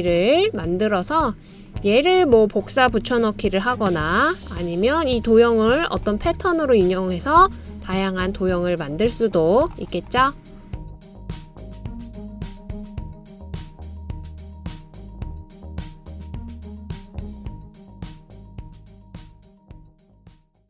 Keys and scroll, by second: 4.3 super+c, 4.6 super+v, 7.5 super+v.